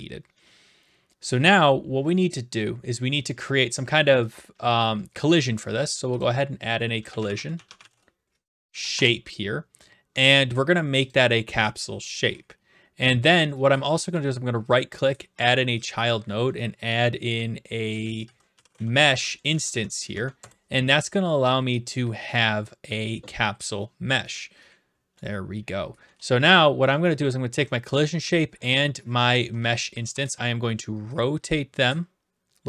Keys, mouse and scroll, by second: 5.2 right click, 6.2 click, 6.9-9.0 typing, 8.9 Return, 11.1 click, 12.1 click, 14.1 right click, 15.4 click, 15.9 click, 16.8 click, 18.0-19.2 typing, 19.5 Down, 19.7 Down, 20.4 Up, 20.4 Return, 22.5-23.5 drag, 23.6-24.7 drag, 24.3-25.0 typing, 25.1-26.3 right drag, 27.2 ctrl+click, 28.2-30.1 typing, 29.9 right click.